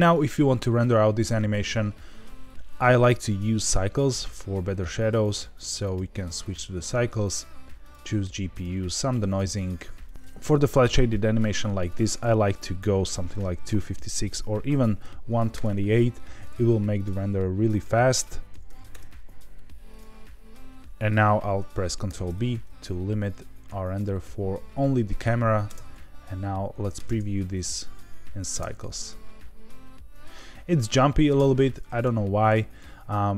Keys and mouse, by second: 1.3 r, 2.1 Escape, 5.2 click, 6.0-7.9 drag, 8.5 click, 9.2 click, 10.0 click, 10.1 ctrl+z, 11.9-16.0 drag, 17.0 click, 17.7-19.2 drag, 20.0 click, 22.0 ctrl+b, 25.6 space, 27.0 space, 27.1 z, 28.5 space, 31.2 space.